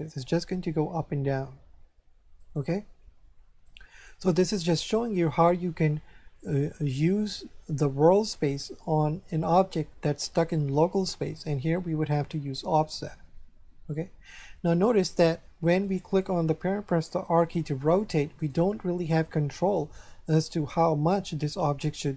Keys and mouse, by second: 2.4 right click, 3.6 right click, 4.6 click, 15.8 right click, 16.9 r, 18.4 right click, 19.6 right click.